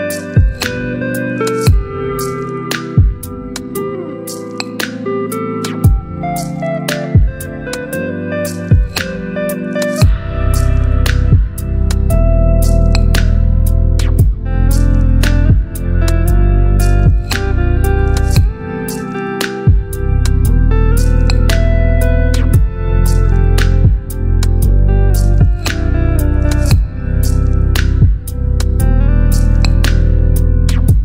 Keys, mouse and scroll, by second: 1.5 click, 2.4 right click, 6.5 click, 11.5 click, 16.6 click, 18.8 right click, 21.4 click, 22.5 right click, 23.8 click, 27.5 ctrl+d, 29.6 click, 30.7 right click.